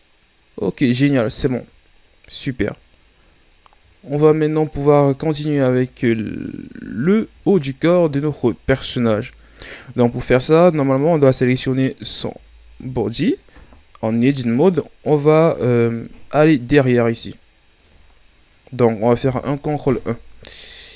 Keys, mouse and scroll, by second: 0.5 scroll up 4, 1.2-1.8 shift+scroll down 5, 2.0-3.0 scroll down 1, 3.0-6.2 shift+scroll up 3, 6.5-7.2 shift+scroll down 5, 10.8 right click, 13.5 Tab, 14.8-17.9 middle drag, 19.3 ctrl+KP_1, 20.5-20.9 ctrl+scroll down 1.